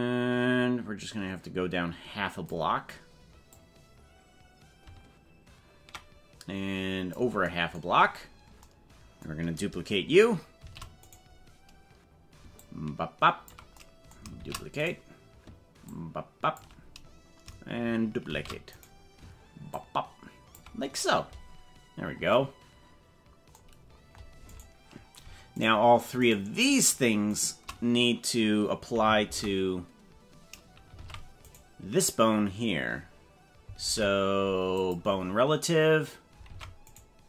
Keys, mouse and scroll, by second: 3.5-7.3 drag, 8.0 scroll down 4, 10.6 shift+d, 12.5 ctrl+click, 14.5 shift+d, 15.8 ctrl+click, 16.8-17.1 scroll down 4, 18.3 shift+d, 19.7 ctrl+click, 21.6-22.2 scroll up 3, 22.6-23.0 scroll up 2, 24.5 right click, 25.6 shift+right click, 26.2 right click, 27.4 right click, 29.2 ctrl+p, 31.0 ctrl+Tab, 31.5 right click, 33.8 ctrl+p, 36.6 ctrl+Tab, 37.0 right click.